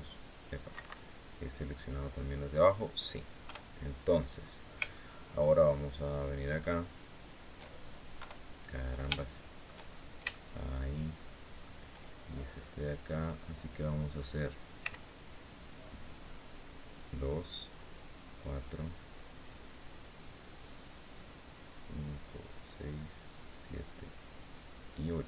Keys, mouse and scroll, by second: 0.1 click, 0.5 Escape, 0.7-1.8 drag, 2.4 scroll down 2, 3.2 KP_7, 4.1-4.5 scroll up 2, 4.6 shift+click, 5.4-6.5 shift+drag, 6.6-7.0 shift+scroll up 2, 7.9 KP_7, 8.9 shift+click, 9.7 shift+scroll up 2, 10.0 shift+click, 10.5-11.5 shift+middle drag, 12.0-12.5 shift+scroll up 2, 14.5 c, 15.3 click, 16.5 click, 17.8 click, 19.7 click, 22.1 click, 23.0 click, 24.3 click, 25.0 Escape.